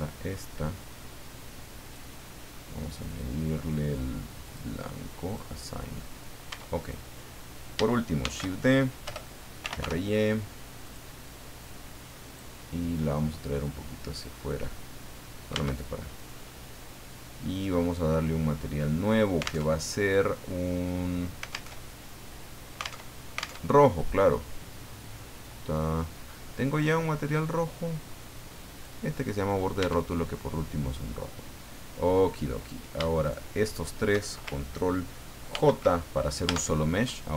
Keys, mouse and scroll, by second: 1.8 click, 3.1 click, 4.4 click, 5.3 click, 6.5 Tab, 6.8 right click, 8.2 shift+d, 9.0 Return, 9.3-10.3 typing, 10.8 click, 11.6 click, 12.6 middle click, 13.8 click, 15.5 Tab, 16.1 right click, 19.7 alt+Tab, 21.7 alt+Tab, 23.0 alt+Tab, 24.0 click, 24.9-25.7 scroll down 4, 25.9-26.2 scroll up 2, 26.8-27.7 scroll up 6, 28.8 click, 29.8 Tab, 30.3-30.9 scroll down 2, 32.5 right click, 33.2 shift+right click, 33.7 shift+right click, 35.5 ctrl+j, 36.5 Tab.